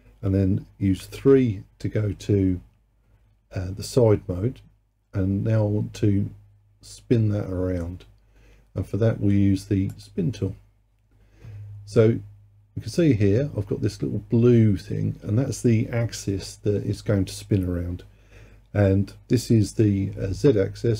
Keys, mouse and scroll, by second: 1.0 KP_3, 10.0-13.0 drag.